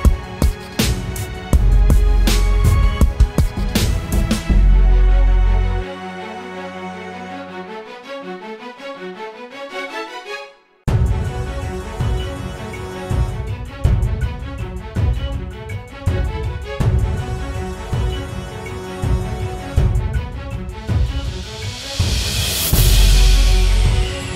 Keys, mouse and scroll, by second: 8.4 double click, 14.9-16.6 typing, 18.3-19.4 typing.